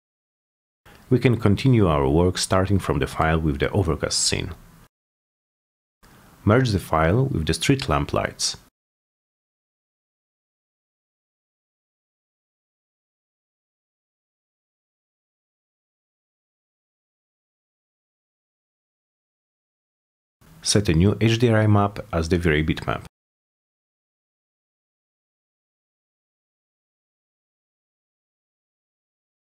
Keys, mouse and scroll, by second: 5.2 click, 5.8 click, 6.4 click, 8.1 click, 9.4 click, 10.6 click, 11.4 click, 13.1 click, 13.8 click, 14.6 p, 15.0 z, 15.3-16.4 alt+middle drag, 16.6 middle click, 16.7 alt+middle click, 17.1 alt+middle click, 17.3 middle click, 18.2 c, 18.7 click, 19.8 click, 20.4 m, 21.0 click, 21.1 click, 23.0 click, 25.1 click, 26.9 click, 29.2 click.